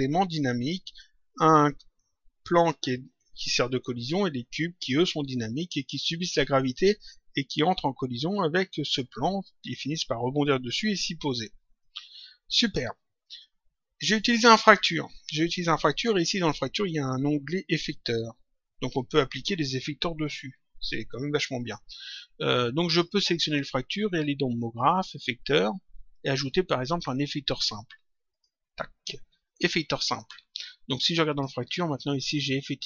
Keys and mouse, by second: 7.3 click, 11.6 click, 17.6 click, 23.2 click, 24.6 click, 28.2 click, 31.2 click.